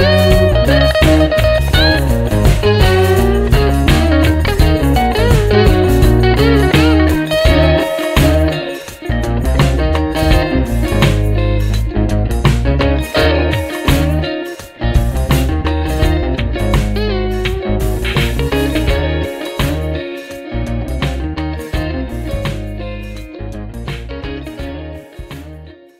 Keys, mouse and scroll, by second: 1.1 click, 1.8-3.4 drag, 3.8 shift+click, 5.1 click, 5.7 click, 7.2 click, 8.4 click, 9.7 click, 10.8-13.3 drag, 14.0-17.6 drag, 18.3 click, 20.7 click, 22.1 click, 23.3 click.